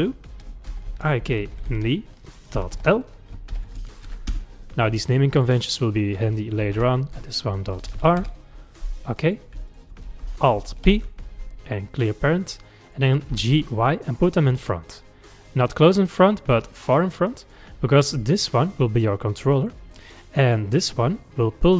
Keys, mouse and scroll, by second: 1.7 e, 5.4 click, 6.3 F2, 9.3 click, 9.7 shift+click, 10.9 alt+p, 12.6 middle click, 13.3 g, 18.4 click, 20.1 click, 20.7 click.